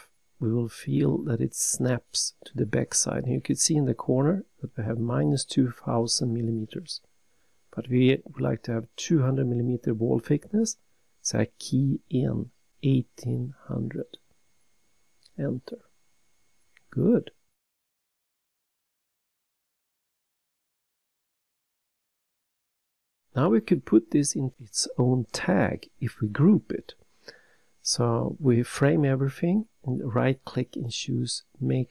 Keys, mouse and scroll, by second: 1.0 click, 2.0 click, 3.0 click, 13.2 1, 14.1 8, 15.0 0, 15.5 0, 16.4 Return, 17.7 scroll down 3, 18.6 middle click, 22.9 scroll up 1, 27.4 click, 28.6 click.